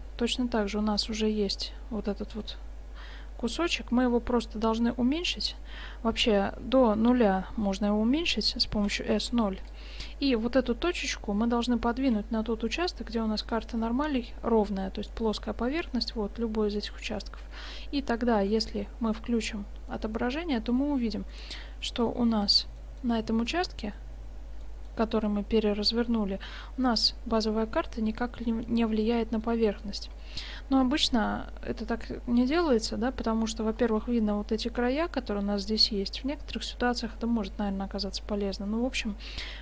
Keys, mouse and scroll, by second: 0.3 click, 1.0-2.1 middle drag, 2.3 s, 8.8 s, 10.2-12.0 middle drag, 12.2 g, 13.8-15.8 drag, 15.4 g, 17.6 Tab, 18.2 middle click, 18.5 shift+z, 22.8-24.7 middle drag, 26.5-28.3 middle drag, 28.3-29.2 scroll up 1, 29.2 scroll up 1, 29.6-31.1 middle drag, 33.8-35.8 middle drag.